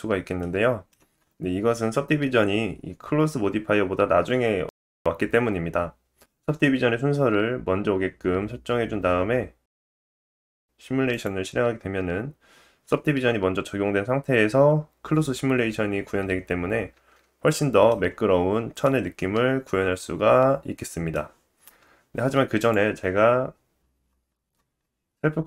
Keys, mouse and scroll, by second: 0.3 middle click, 6.3-7.6 drag, 9.6-11.0 drag, 16.9 space, 17.4 middle click, 17.9-18.8 scroll up 2, 18.8 middle click, 21.7-23.3 drag, 23.7-25.4 drag, 23.7-24.8 scroll down 8.